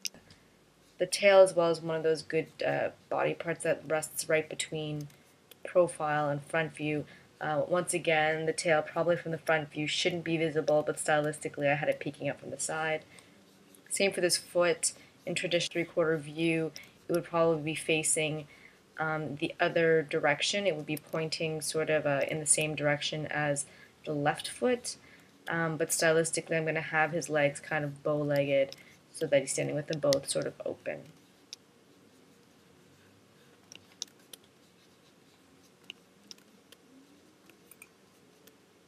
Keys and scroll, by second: 4.7 space, 5.6 space, 9.6 space, 11.3 space, 12.0 space, 17.3 space, 21.1 space, 22.8 space, 25.6 space, 29.3 space, 34.6 space, 36.9 space, 37.9 space.